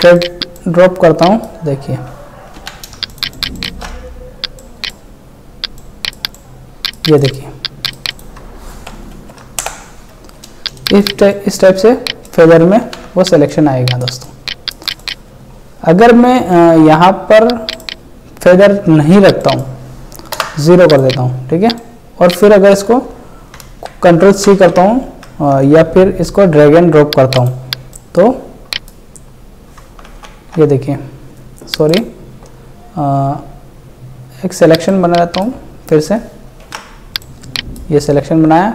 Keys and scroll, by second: 2.6 ctrl+t, 3.0 ctrl+space, 3.9 ctrl+alt+space, 9.1 ctrl+Delete, 9.6 alt+Delete, 12.8 ctrl+t, 23.6 ctrl+c, 30.1 ctrl+z, 36.7 ctrl+d.